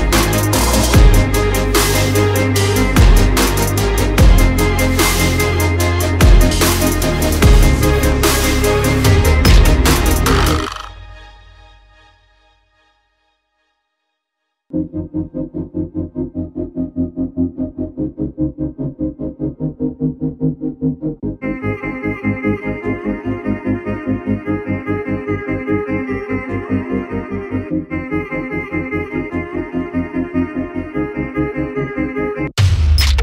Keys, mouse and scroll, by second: 0.0 click, 0.2 click, 1.8 click, 3.5 Tab, 5.1-11.9 typing, 6.7 Tab, 13.3 typing, 13.7 Tab, 17.8-18.9 typing, 20.0 space, 21.4-25.8 typing, 26.4 click, 26.6 right click, 28.4 click, 29.6 click, 29.9-31.2 typing.